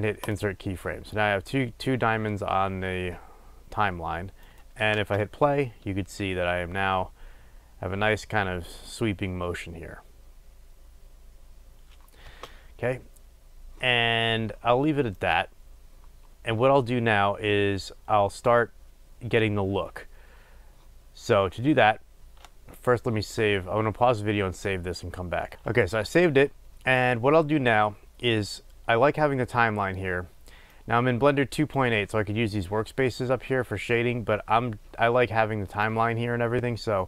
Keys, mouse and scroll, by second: 0.5-4.6 right drag, 4.6 click, 12.3 space, 25.5-37.0 drag.